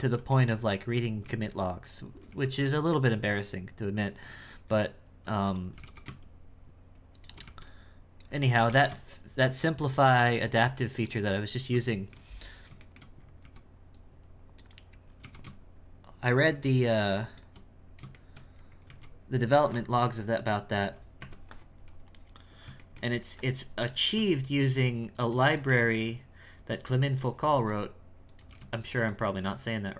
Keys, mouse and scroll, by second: 0.3 shift+middle click, 0.6-1.0 scroll down 1, 1.0 shift+middle click, 1.5-2.3 scroll up 1, 2.3 c, 5.7 g, 11.1-11.8 scroll down 5, 11.8 shift+middle click, 12.2-12.8 scroll down 1, 12.8 shift+middle click, 13.2 scroll up 4, 13.4 c, 14.9 scroll up 1, 15.1 g, 18.3 shift+middle click, 18.5-18.8 scroll down 3, 18.8 alt+a, 19.2-20.2 scroll down 3, 20.2-21.2 scroll down 2, 21.2 Tab, 21.6-22.2 scroll up 2, 22.2 right click, 22.8 shift+middle click, 23.1-24.0 scroll up 8, 24.0 g, 25.5 right click, 25.7 g, 28.2 right click, 28.5 g.